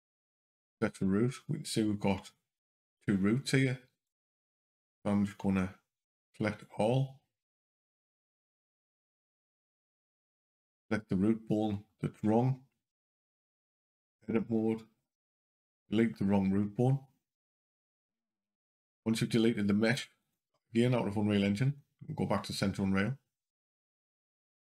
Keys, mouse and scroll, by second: 6.4 shift+click, 10.5 click, 13.7 click, 14.8 Delete, 17.3 click, 18.5 click, 20.0 click.